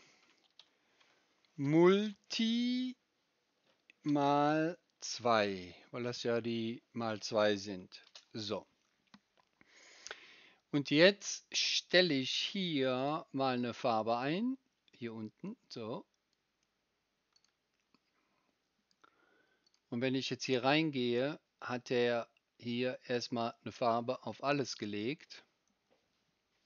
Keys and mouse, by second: 0.0-13.1 shift+middle drag, 13.1-17.3 right drag, 17.3 middle click, 17.4-19.6 right drag, 19.6 middle click, 19.7-26.6 right drag, 26.6 middle click.